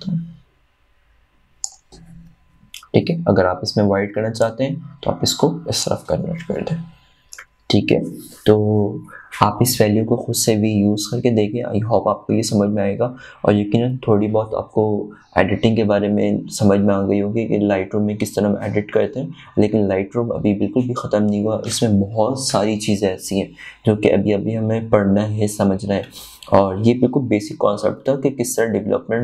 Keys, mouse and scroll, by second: 5.9-9.3 drag.